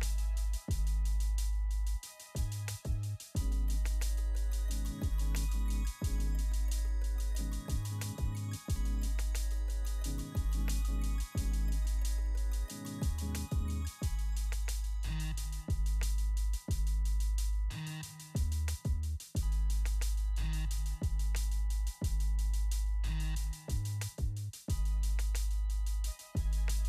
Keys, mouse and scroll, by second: 5.7 click, 8.3 click, 10.4 click, 14.6 click, 19.1 click, 23.3 click.